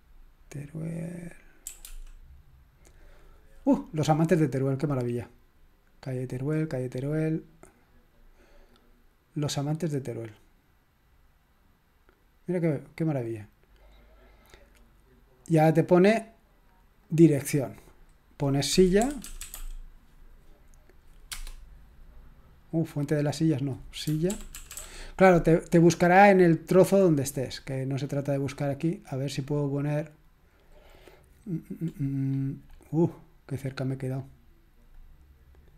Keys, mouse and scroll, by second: 1.4-2.4 typing, 8.7 click, 17.1 click, 18.8-20.0 typing, 21.3 Return, 23.3 click, 24.0-25.2 typing, 25.9 click, 26.6-27.8 scroll down 1, 27.8-28.7 scroll up 1, 29.4-30.7 drag, 32.1-33.0 scroll up 1, 33.0-34.4 scroll down 1, 34.4-35.0 scroll up 1, 35.0-35.7 drag.